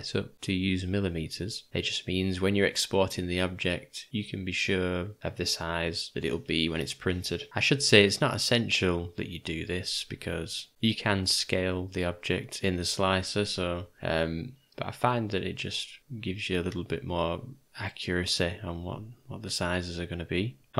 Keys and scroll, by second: 9.4 Tab, 15.0 Tab.